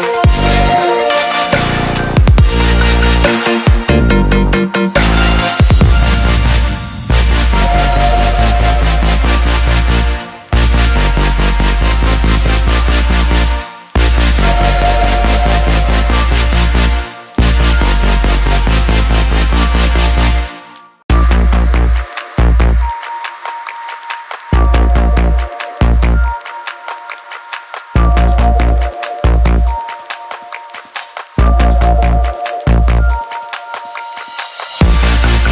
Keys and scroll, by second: 17.9 ctrl+t.